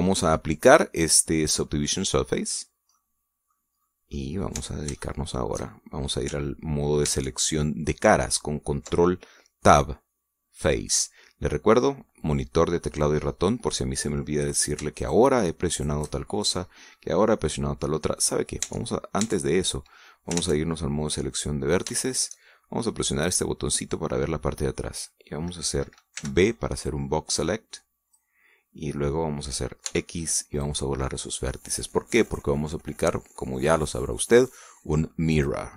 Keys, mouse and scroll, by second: 0.6-1.0 middle drag, 3.2 click, 3.7-4.4 middle drag, 4.8-5.3 middle drag, 5.3 Tab, 5.7 shift+click, 7.8 ctrl+Tab, 11.3 click, 13.8 click, 15.2 right click, 15.7 shift+right click, 16.5 shift+right click, 16.9 shift+middle click, 17.8-19.0 middle drag, 19.4 Tab, 19.7-20.0 scroll up 1, 20.2 scroll down 1, 21.1 ctrl+Tab, 22.1 click, 22.6 shift+middle click, 24.1 click, 26.9 b, 27.6-29.1 drag, 30.6 x, 31.3 click, 33.0 click.